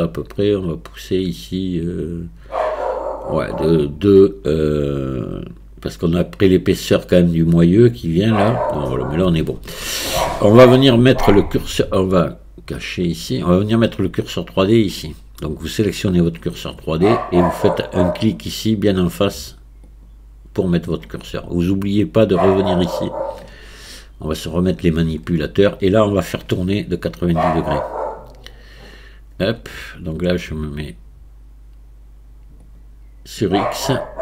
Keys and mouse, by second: 12.9 click, 15.9 click, 19.9 click, 24.9 click, 27.6 click, 32.7 click.